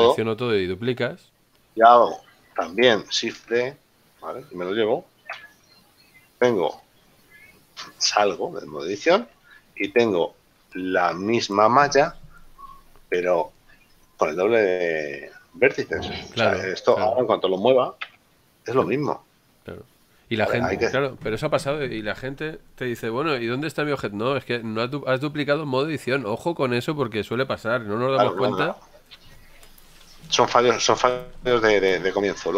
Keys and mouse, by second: 0.8 a, 3.7 shift+d, 4.8 Return, 7.0 click, 18.1 g, 19.4 right click, 30.2 Tab.